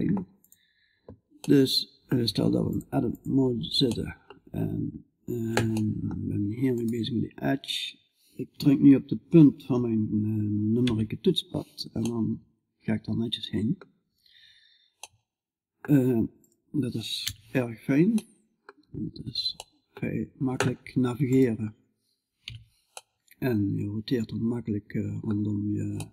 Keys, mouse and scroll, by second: 1.2-2.7 middle drag, 2.7 click, 3.3 middle click, 3.4-5.2 drag, 5.2-10.2 middle drag, 10.3 KP_Decimal, 12.2 middle click, 13.0 middle click, 13.5 middle click, 14.7-16.7 middle drag, 16.7 right click, 16.7 KP_Decimal, 17.6-20.2 middle drag, 21.9 right click, 21.9 KP_Decimal, 22.5 middle click, 23.4 middle click, 24.2 scroll up 1, 24.3 middle click, 25.0-26.1 middle drag.